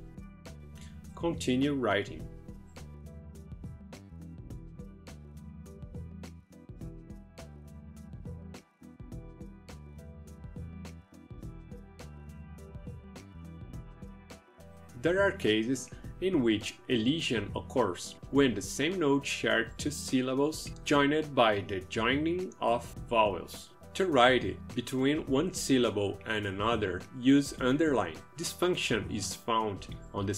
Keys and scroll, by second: 0.5 space, 1.7-10.4 typing.